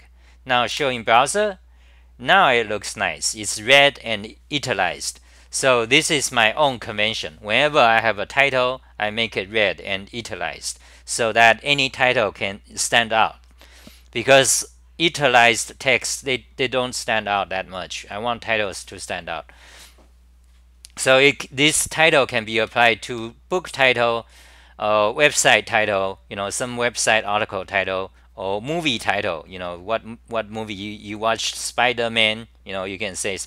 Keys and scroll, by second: 0.8 super+r, 22.7 ctrl+g, 23.1 m.